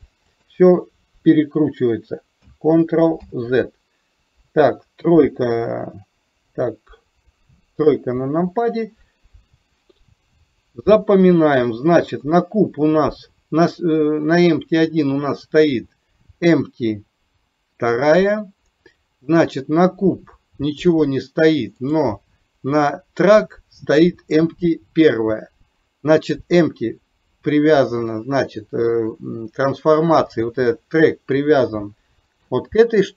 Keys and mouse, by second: 3.3 ctrl+z, 7.9 KP_3, 12.4 click, 19.7 click, 21.8 click, 32.3 shift+click.